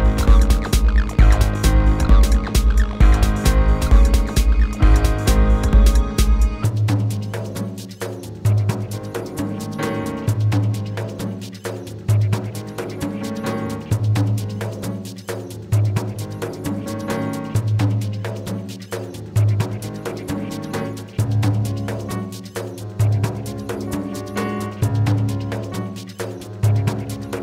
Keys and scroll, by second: 2.7 w.